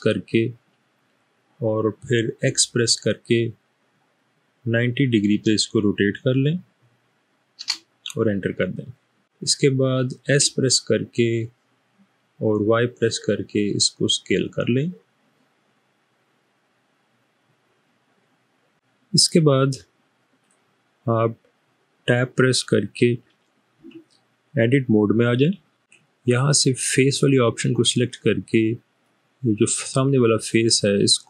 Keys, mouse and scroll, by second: 2.3 typing, 4.5-5.3 typing, 7.5 typing, 10.5 typing, 12.3-13.0 typing, 23.8 Tab.